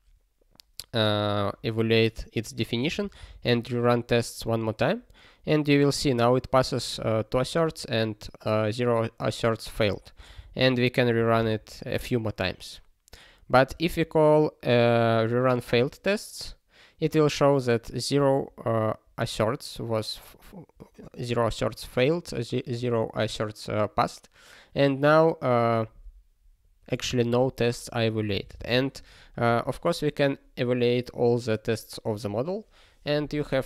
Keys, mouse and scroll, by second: 3.4 ctrl+r.